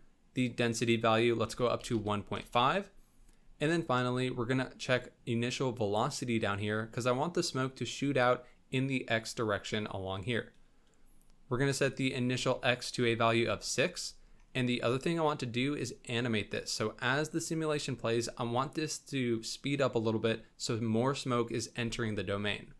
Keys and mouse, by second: 0.3 click, 4.9 click, 11.9 click, 15.8 click.